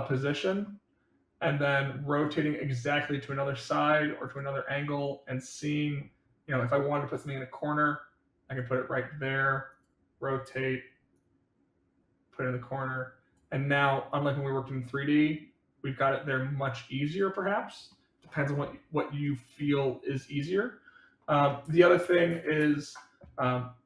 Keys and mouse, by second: 2.0 click, 5.4 click, 7.0-8.5 drag, 9.6 click, 11.1-13.3 drag, 13.7-17.9 middle drag, 21.9 ctrl+z, 22.2 ctrl+z.